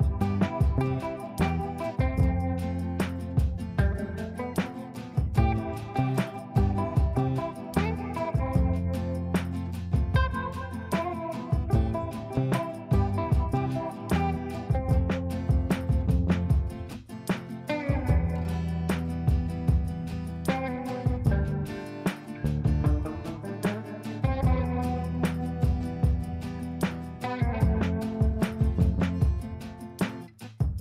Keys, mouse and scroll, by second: 1.4-3.7 drag, 3.8 space, 5.6 click, 7.8 space, 9.9 click, 13.4 click, 14.8 right click, 15.3 click, 17.4 ctrl+a, 18.9 shift+o, 19.1 shift+r, 20.3-22.8 typing, 23.0 ctrl+space, 23.8 shift+click, 23.9-24.8 typing, 24.8 click, 26.9-28.7 shift+drag, 29.6-30.5 typing, 30.6 ctrl+g.